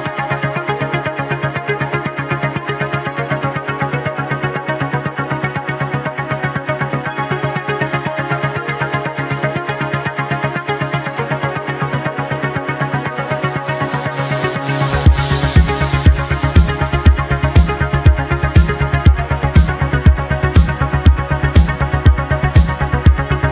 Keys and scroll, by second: 2.1 ctrl+z, 2.8 ctrl+z, 3.2 space, 4.1 space, 4.9 ctrl+z, 6.3 ctrl+z, 10.7 space, 11.2 space.